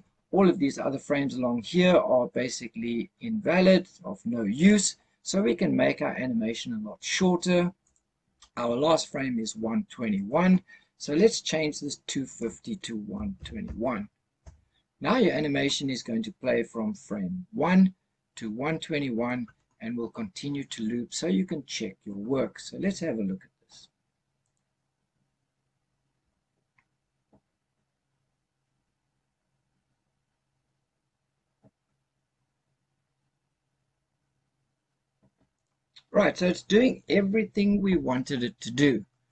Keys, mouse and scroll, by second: 4.4 click, 7.7 click, 12.2-14.4 drag, 24.3 click, 35.4 click.